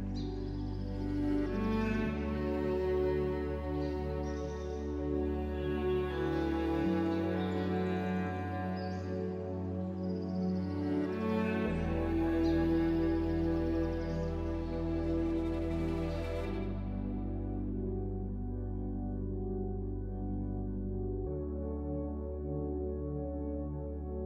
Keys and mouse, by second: 0.7 shift+click, 1.7 shift+click, 3.6 shift+click, 4.4 shift+click, 5.0 shift+click, 5.8 click, 6.8 click, 8.0 shift+middle click, 8.4 shift+middle click, 8.7 middle click, 9.3 shift+click, 11.2 shift+click, 11.6 shift+click, 12.6 shift+click, 14.0 shift+click, 15.3-17.2 drag, 19.6 click, 21.0-22.5 drag.